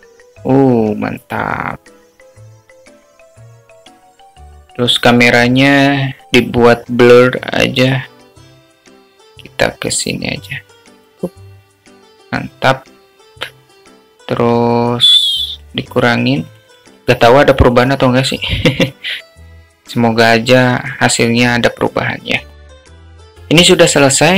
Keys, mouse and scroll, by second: 10.4 click, 16.4 click, 19.9-21.0 drag.